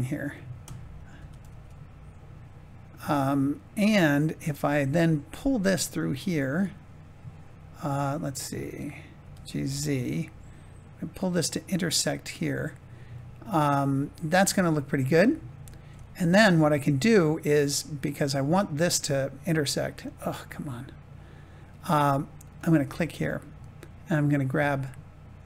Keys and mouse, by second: 0.2 click, 1.1 g, 1.4 z, 4.6 click, 5.0 middle click, 9.1 g, 9.4 z, 12.3 click, 13.1-14.1 middle drag, 15.0 Tab, 15.6 click, 15.9-17.4 middle drag, 18.4 middle click, 20.0 click, 20.4-21.6 middle drag, 22.7 Tab, 24.8 click.